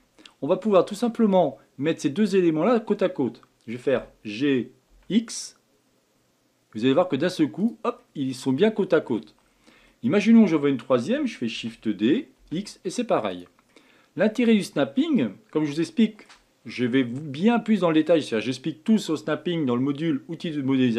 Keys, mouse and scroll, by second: 0.1 scroll up 2, 0.5-3.7 shift+middle drag, 8.0-9.3 middle drag, 9.3 scroll down 5, 9.8-11.5 shift+middle drag, 11.5 shift+d, 13.7-14.7 middle drag, 14.7 scroll up 1, 15.8-18.9 shift+middle drag.